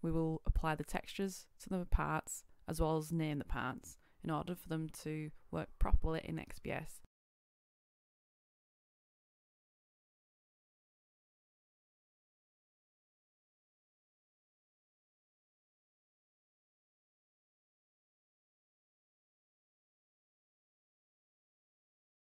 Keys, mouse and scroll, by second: 4.2 scroll down 1, 4.6 click, 8.0 Return, 9.3 scroll up 1, 10.4 click, 12.3-13.5 middle drag, 13.7 click, 16.4 Return, 17.3 click, 18.7 Return, 19.9 middle click, 21.3 click.